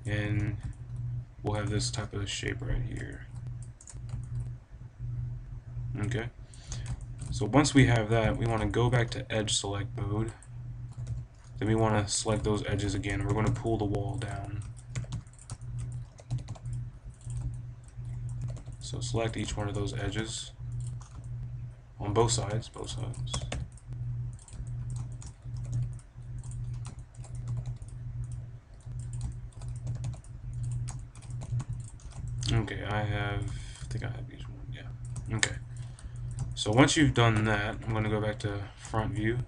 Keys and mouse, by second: 0.2 KP_5, 0.7-1.8 middle drag, 1.6 Tab, 2.3-3.5 middle drag, 3.7 Tab, 6.0 middle click, 6.6 a, 6.9 click, 8.9-10.9 drag, 10.9 b, 13.1 b, 14.8 b, 16.1 b, 18.3 b, 19.4-21.8 right drag, 19.5-21.0 drag, 19.9 b, 21.8 middle click, 22.0 middle click, 22.2 b, 23.2 b, 24.7 click, 25.3 click, 25.4 b, 26.4-28.2 drag, 27.4 b, 29.2-30.6 right drag, 29.4-31.2 drag, 29.8 b, 31.3 b, 31.9-33.1 drag, 35.8 click, 37.1 click, 37.7 KP_1, 38.3 KP_5.